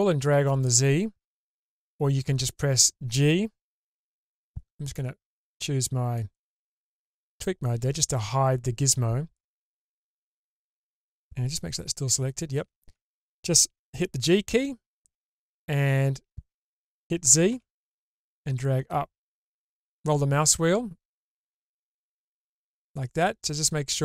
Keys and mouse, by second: 6.2-7.0 drag, 11.5-12.8 middle drag, 14.5 g.